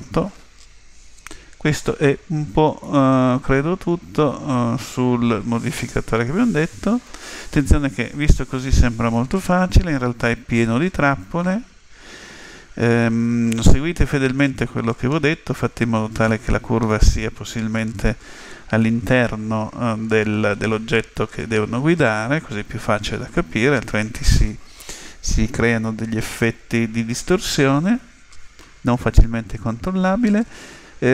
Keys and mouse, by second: 2.9-4.6 middle drag, 16.3-19.5 middle drag, 19.0 KP_7.